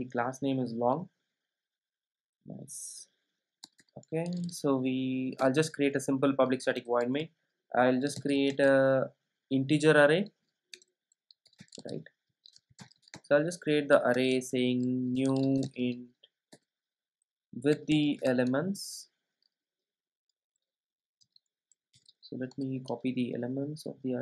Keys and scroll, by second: 5.4 Return, 16.6 Return, 22.0 super+e.